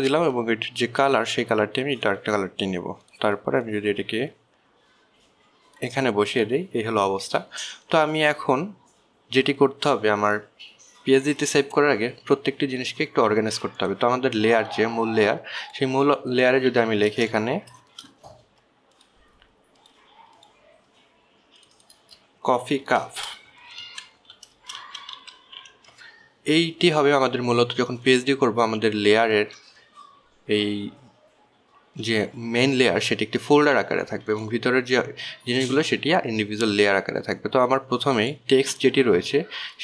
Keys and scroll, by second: 24.2-27.3 typing.